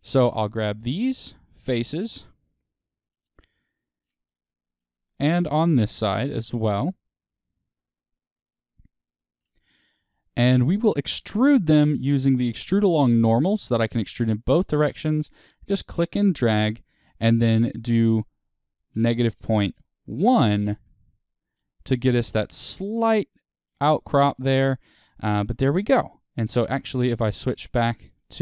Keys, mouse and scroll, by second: 0.6 shift+click, 4.2 middle click, 5.5 shift+click, 9.6-10.7 middle drag, 10.7 shift+click, 11.0-15.2 middle drag, 15.2-21.9 drag, 20.8 KP_Enter, 21.9-26.4 middle drag, 22.5 Tab, 25.4-26.4 scroll up 2, 26.4 click, 27.2-28.4 middle drag.